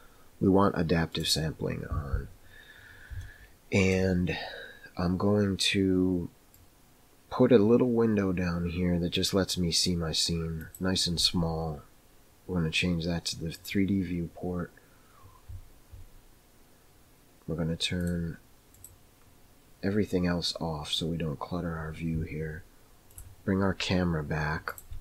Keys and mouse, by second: 1.1 click, 3.2 shift+middle click, 6.5 click, 10.6 click, 18.0 click, 18.7 click, 23.1 click, 24.8 click.